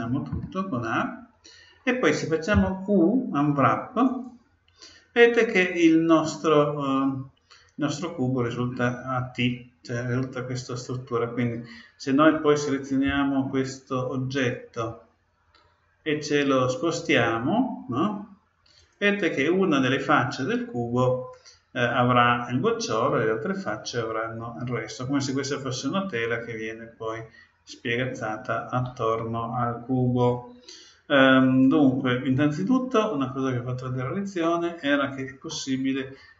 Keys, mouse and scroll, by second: 0.0 a, 0.3 a, 2.5 u, 13.0 g, 34.4-36.3 middle drag.